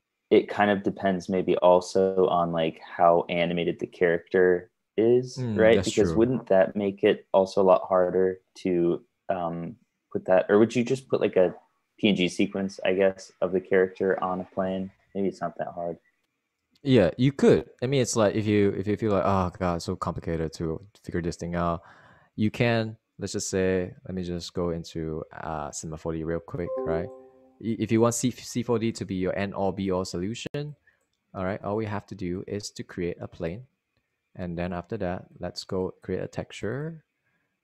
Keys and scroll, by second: 26.9 super+Tab, 28.4 super+Tab.